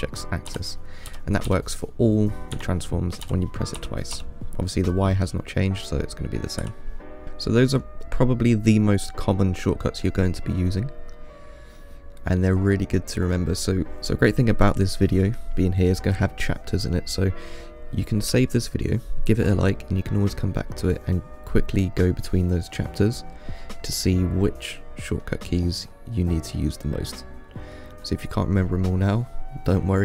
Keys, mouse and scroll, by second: 0.7 g, 3.5 g, 7.2 scroll up 1, 7.4-8.2 middle drag, 8.2-11.4 scroll up 2, 11.4-12.8 middle drag, 12.8-13.5 scroll up 2, 13.5-14.0 scroll up 1.